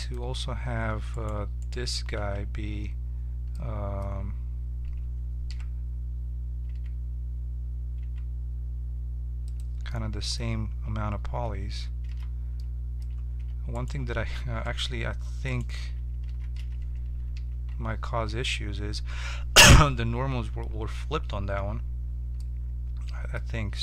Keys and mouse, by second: 1.1-2.8 right drag, 2.2 Tab, 3.5-7.8 middle drag, 5.5 e, 9.9 middle click, 10.4 Tab, 11.4 Tab, 12.1 z, 13.4 Tab, 13.7-15.4 right drag, 14.8 h, 15.8 Tab, 16.2 a, 16.6 a, 17.3 ctrl+n, 18.3 Tab, 22.5-23.8 middle drag.